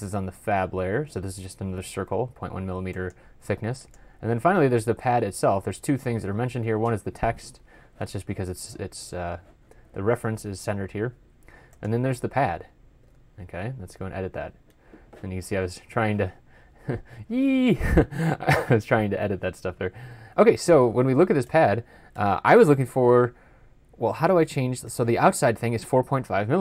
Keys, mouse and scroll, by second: 4.5 typing, 13.0 typing, 16.5 typing.